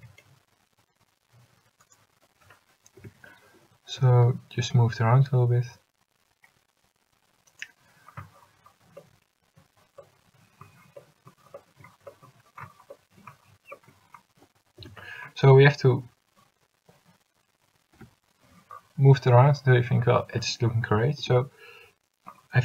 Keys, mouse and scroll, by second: 0.1 g, 3.1 l, 4.1 g, 14.9 a, 16.1 l, 18.1 l, 21.3 u.